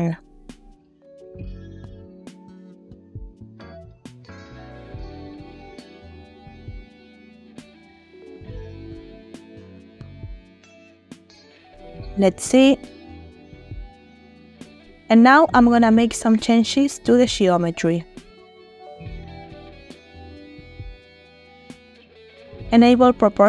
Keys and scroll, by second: 5.1 space, 5.8 Tab, 7.7 1, 8.3 Return, 9.5 Tab, 11.2 Tab, 11.4 space, 14.8 space.